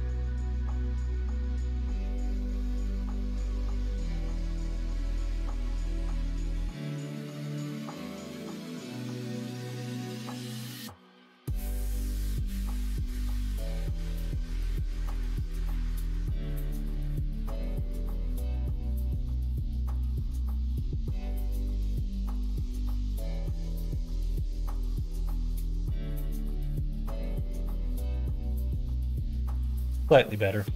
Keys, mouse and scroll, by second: 0.0 middle click, 2.0 click, 3.5 ctrl+a, 4.8 click, 8.5 ctrl+j, 22.0 middle click, 22.5 middle click, 25.0 click, 26.4 click, 26.9-29.8 middle drag, 30.3 middle click.